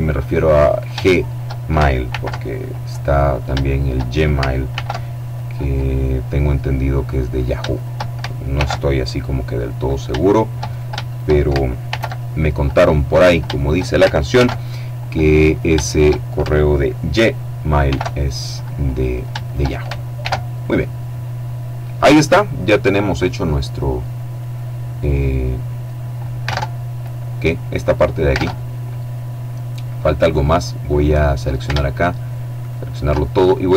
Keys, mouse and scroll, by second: 0.1 shift+right click, 1.5 alt+m, 2.0 alt+click, 2.7 shift+right click, 4.1 alt+m, 4.7 alt+click, 6.8 shift+right click, 7.9 alt+m, 8.5 alt+click, 9.3 shift+right click, 10.5 shift+right click, 11.3 alt+m, 11.7 alt+click, 12.6 shift+click, 13.7 alt+m, 14.2 alt+click, 14.9 shift+right click, 17.2 alt+m, 17.7 alt+click, 18.5 shift+right click, 19.6 alt+m, 19.9 alt+click, 20.2-20.6 alt+scroll down 2, 20.6 middle click, 22.0-22.6 scroll down 2, 22.6 middle click, 23.4-24.0 scroll up 2, 24.0 middle click, 25.9 alt+Tab, 27.8 alt+Tab, 29.6 middle click, 30.3 middle click, 32.0 alt+shift+right click, 33.1-33.7 drag.